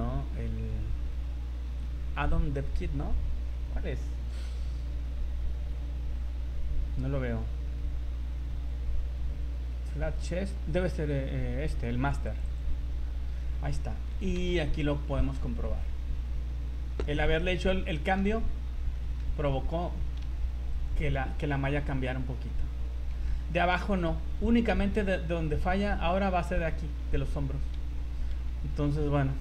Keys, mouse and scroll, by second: 12.6 click, 13.6 scroll up 2, 14.3 z, 14.7 middle click, 17.1 KP_1, 17.9 shift+middle click, 18.3 scroll up 4, 18.9 shift+middle click, 19.3 scroll up 2, 20.2 z, 20.7 right click, 22.0-22.4 scroll down 4, 23.1 scroll down 3, 23.3 z, 24.0-24.4 scroll up 5, 24.7 z, 25.7 scroll up 2, 26.7 scroll up 2, 27.0 z, 27.7 z, 28.4 Tab, 28.9 right click.